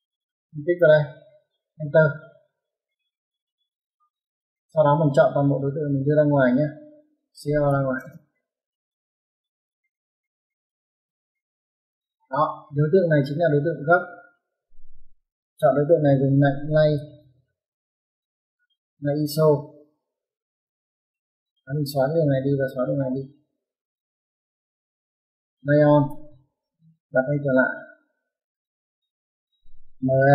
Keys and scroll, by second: 1.7 space, 7.2-7.9 typing, 11.0 space, 14.7 Escape, 16.9-18.0 typing, 24.5 typing, 26.0-26.5 typing, 29.8-30.3 typing.